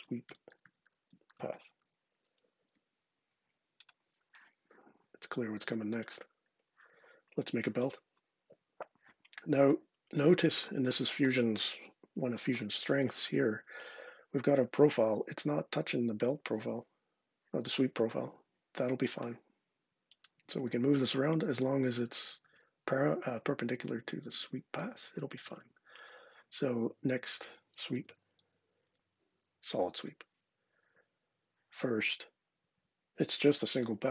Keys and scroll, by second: 0.0-2.1 typing, 2.4 Return, 27.3-28.4 typing, 29.8 Return.